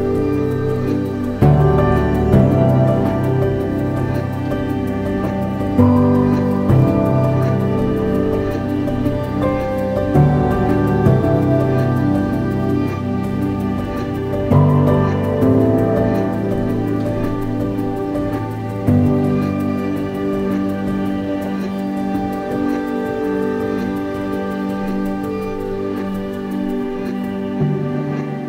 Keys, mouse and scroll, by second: 1.3 scroll down 1, 1.8 Tab, 4.6 click, 6.3-10.4 drag, 8.1 KP_1, 9.7 scroll down 1, 12.8-21.1 drag, 23.4 g, 25.6 scroll up 1, 27.1 g.